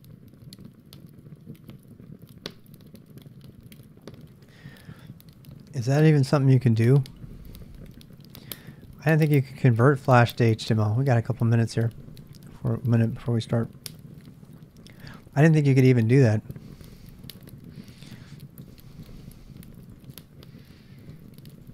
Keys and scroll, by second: 0.4 ctrl+alt+r, 2.0 BackSpace, 19.1-21.7 typing.